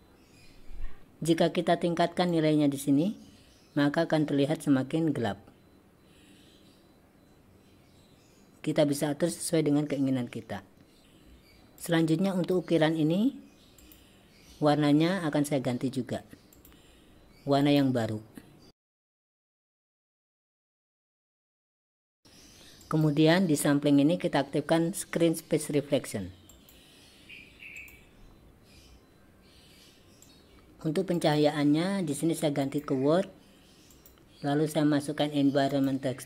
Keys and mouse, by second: 2.4-11.0 drag, 11.8-12.6 drag, 13.8 click, 16.6 click, 17.7-18.2 drag, 18.8 click, 20.9 click, 21.6 click, 22.9 click, 26.5 click, 31.3-32.9 drag, 34.1-36.2 drag.